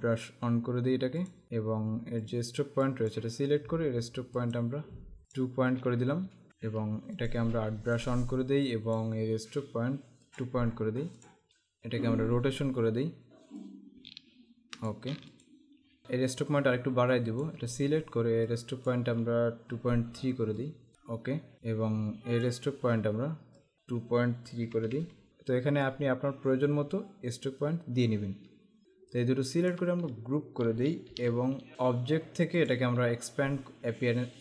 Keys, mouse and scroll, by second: 0.0 click, 1.4 click, 2.4 click, 4.5 click, 5.4 click, 6.5 click, 10.4 click, 13.7 click, 15.3 click, 17.2 click, 18.6 click, 20.7 click, 20.9 KP_Enter, 21.5 click, 23.7 click, 24.8 KP_Decimal, 24.9 KP_3, 28.8 click, 31.1 ctrl+g, 31.7 click, 32.7 click.